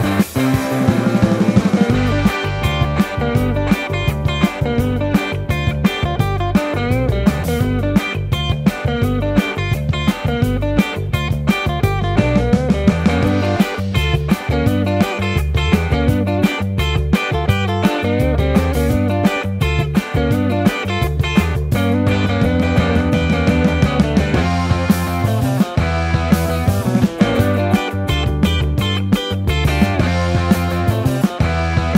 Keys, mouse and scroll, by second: 0.1 ctrl+x, 0.5 KP_1, 4.3 Tab, 5.5 Tab, 6.0 ctrl+r, 8.7 ctrl+b, 10.8 Tab, 12.9 Tab, 13.3 l, 13.8 y, 14.3 Tab, 14.7 Tab, 15.1 1, 15.5 3, 16.1 x, 20.7 f, 21.2 f, 24.2 ctrl+z, 24.5 ctrl+z, 25.0 3, 25.3 i, 28.0 ctrl+z, 28.5 1, 28.8 ctrl+shift+b, 30.1 ctrl+z.